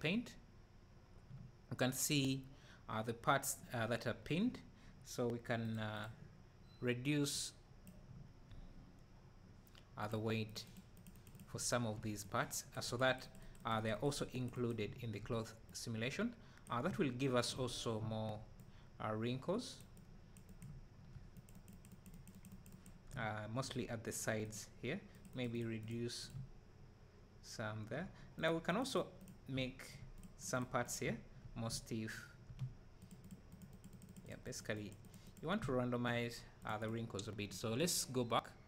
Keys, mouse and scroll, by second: 0.8-3.0 drag, 1.4 `, 3.0-3.7 scroll up 1, 8.1 `, 8.3-10.1 drag, 11.5 `, 11.7 click, 14.8 `, 14.9-16.9 drag, 16.9 `, 17.3-18.0 drag, 17.7 scroll down 1, 18.0 `, 18.6 click, 20.6-22.8 drag, 20.6 `, 23.1 `, 23.3 click, 23.5-24.7 drag, 26.3 `, 26.6-29.0 drag, 29.2-29.5 drag, 29.5 `, 30.1-30.6 drag, 30.8-32.0 drag, 31.0 `, 33.0 click, 35.6 `, 35.8-38.6 drag.